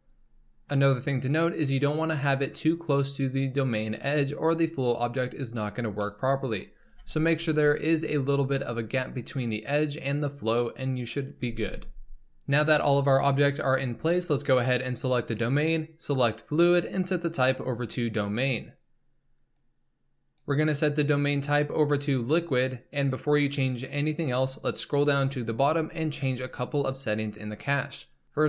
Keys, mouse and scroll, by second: 0.0-3.3 scroll up 3, 5.6-6.0 scroll down 2, 6.0-6.6 middle drag, 6.6 scroll up 2, 6.9 g, 9.1-10.6 scroll down 2, 10.6-11.3 middle drag, 11.3 g, 12.3-14.7 middle drag, 14.7 click, 16.4-24.3 drag, 24.6-26.2 scroll down 24, 28.2 click.